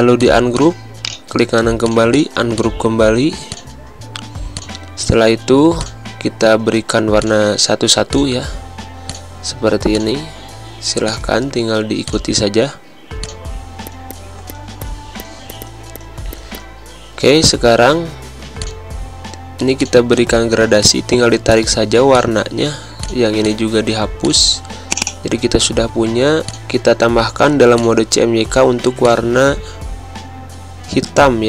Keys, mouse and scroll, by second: 0.9 right click, 1.7 click, 3.2 space, 3.4 click, 3.7 space, 4.4 click, 15.5 space, 15.6 click, 15.9 click, 16.3 click, 16.4 space, 16.5 click, 16.6 space, 18.5-22.9 drag.